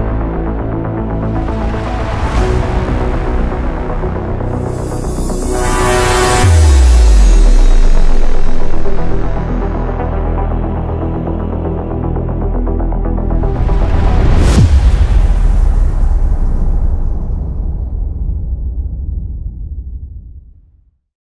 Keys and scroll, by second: 0.0-0.6 typing, 5.1 typing.